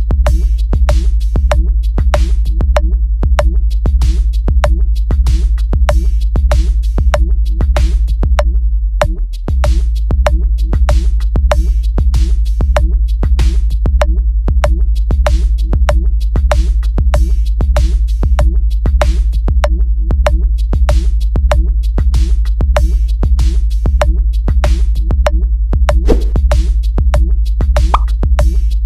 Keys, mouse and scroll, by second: 0.2 click, 0.6 shift+click, 1.2 w, 2.4 click, 3.0 q, 4.5 e, 5.0 click, 6.2 click, 7.6 click, 12.5 click, 14.2 click, 14.8 click, 16.4 right click, 18.9 click, 22.6 click, 25.1 click, 26.2 click, 28.6 click.